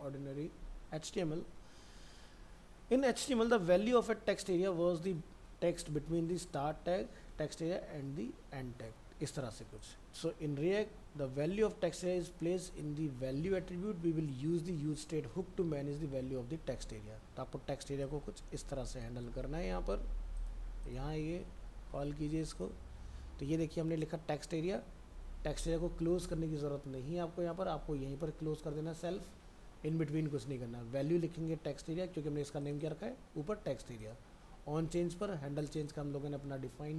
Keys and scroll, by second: 19.3 ctrl+c, 21.1 ctrl+a, 21.4 ctrl+v, 21.9 ctrl+s.